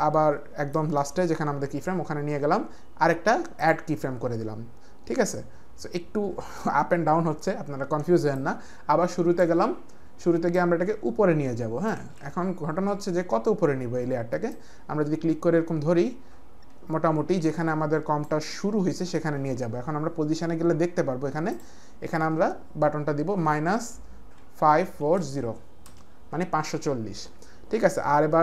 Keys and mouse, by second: 3.6 click, 8.3 click, 10.5 click, 12.1 ctrl+z, 14.6 ctrl+z, 14.6 click, 23.4 KP_Subtract, 24.4 KP_5, 24.8 KP_4, 25.2 KP_0, 25.8 Return.